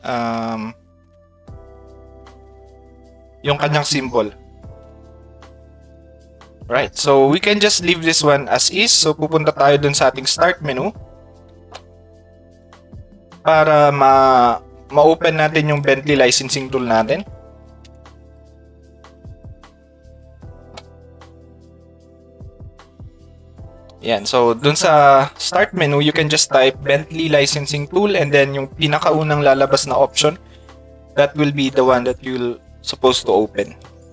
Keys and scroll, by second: 17.0 e.